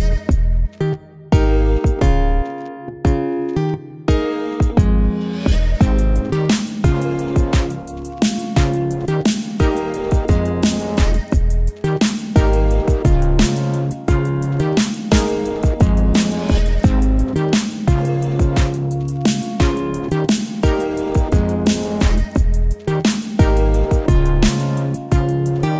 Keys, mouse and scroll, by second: 4.0 v, 5.0 alt+scroll down 1, 5.8 click, 8.9 alt+click, 14.9-20.3 alt+drag, 21.1 alt+scroll up 1, 21.6 alt+scroll, 21.8 alt+scroll down 1, 23.6 click, 24.4-25.7 ctrl+drag.